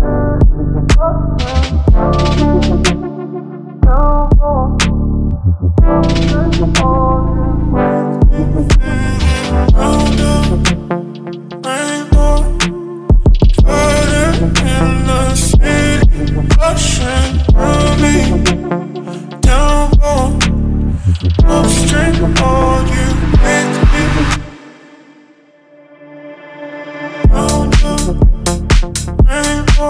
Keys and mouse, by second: 0.7 shift+middle click, 1.5 a, 2.2 ctrl+middle click, 2.9 middle click, 3.2 middle click, 3.5 ctrl+middle click, 3.8 middle click, 5.2 ctrl+middle click, 6.2-7.1 drag, 8.6-10.4 drag, 16.8 click, 18.2 9, 18.7 Return, 18.7 0, 19.1 middle click, 19.7 click, 19.9 click, 21.3 9, 21.7 Return, 23.3 ctrl+middle click, 23.6 middle click, 24.1 ctrl+middle click, 24.7 middle click, 25.8-27.5 drag.